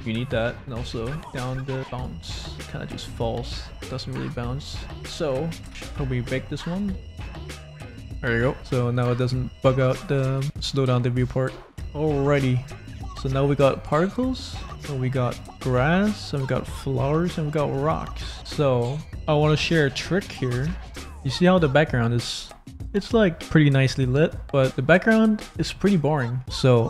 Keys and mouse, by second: 0.5 space, 0.7-2.1 drag, 2.5-4.9 drag, 5.2 ctrl+z, 5.7 space, 6.3 click, 8.5 space, 10.2 space, 10.4 click, 11.4 middle click, 11.9 click, 12.9 space, 15.7 click, 15.7 space, 16.6 shift+click, 21.0 click, 22.0 click, 22.2 middle click, 22.7 middle click, 22.9 click, 24.7 click, 25.0 middle click, 25.7 middle click, 26.8 middle click.